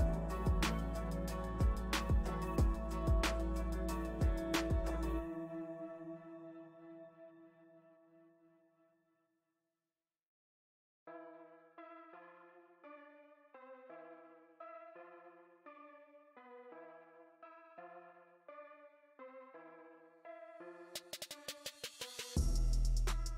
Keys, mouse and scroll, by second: 0.2 middle click, 1.1 shift+c, 1.6 f, 3.5-6.7 drag, 6.7-7.9 middle drag, 7.9 click, 8.5-11.5 middle drag, 11.5-17.7 shift+drag, 17.7-20.5 middle drag, 20.5 space, 21.0 f, 21.8-23.3 drag.